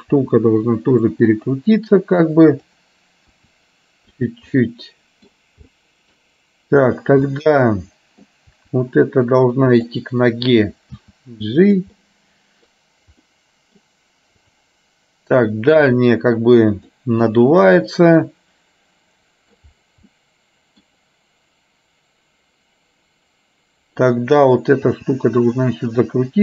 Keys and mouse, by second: 0.3 r, 2.7 click, 3.5 r, 4.6 middle click, 5.7 middle click, 7.0 click, 7.5 middle click, 8.7 r, 11.1 g, 12.1 middle click, 13.3 middle click, 14.6 click, 16.0 r, 18.0-19.6 middle drag, 20.2 middle click, 24.2 click, 25.1 r.